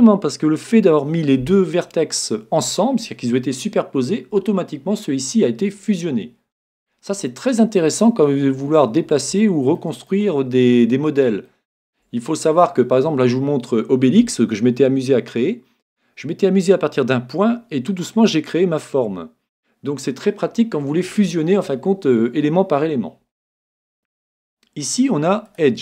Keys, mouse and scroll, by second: 6.9-13.3 middle drag, 23.3-23.9 scroll up 1, 23.9 middle click, 24.1-24.4 scroll down 1, 24.4-25.8 drag.